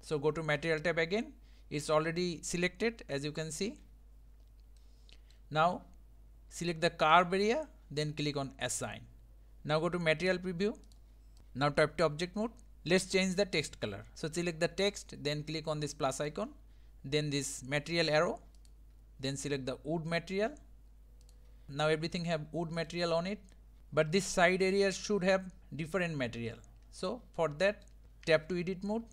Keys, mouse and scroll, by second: 3.6 1, 4.8-7.1 middle drag, 7.1-10.9 drag, 11.4 Tab, 12.0 Tab, 12.7-13.1 scroll down 2, 13.1-13.8 scroll up 2, 14.1 click, 14.9 click, 16.3-21.7 drag, 21.7-23.8 middle drag, 23.8 scroll down 1, 23.9-25.1 scroll up 2, 26.7-28.3 middle drag, 28.3 Tab.